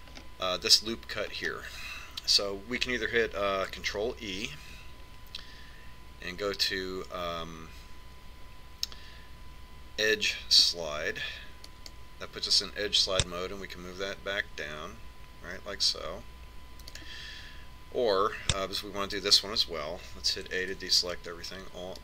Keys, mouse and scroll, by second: 1.1-4.6 middle drag, 2.7 scroll up 1, 6.0 ctrl+e.